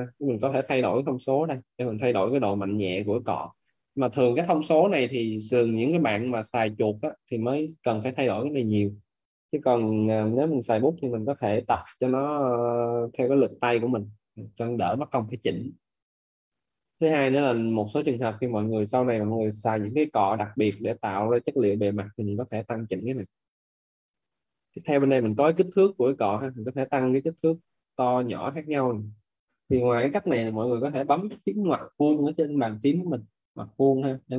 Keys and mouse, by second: 0.3 click, 12.2 click, 26.3 click.